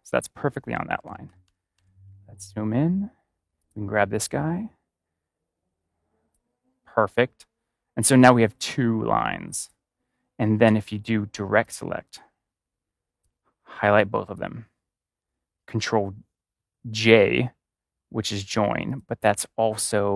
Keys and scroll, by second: 1.0 ctrl+=.